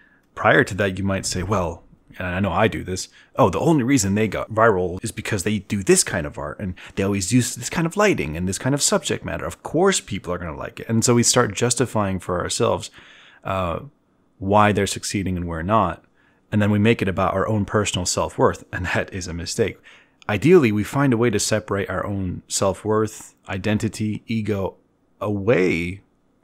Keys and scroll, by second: 0.5 b, 4.3 e, 7.4 b.